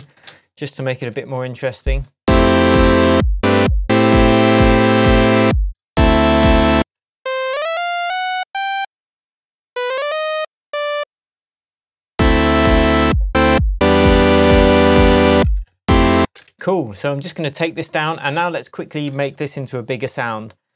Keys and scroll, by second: 0.9 shift+super+j, 6.7 space, 15.1 shift+Tab, 16.1 shift+space, 16.4 super+s.